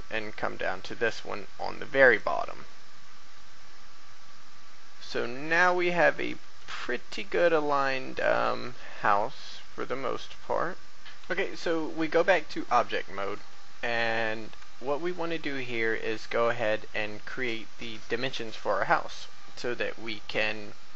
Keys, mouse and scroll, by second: 0.7 typing, 2.0 click, 2.7 typing, 6.1-6.4 typing, 6.7-10.9 drag.